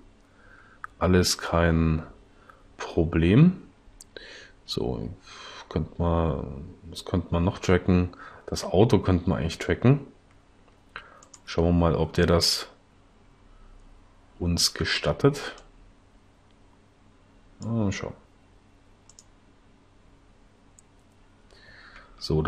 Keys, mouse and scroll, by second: 22.2 Left.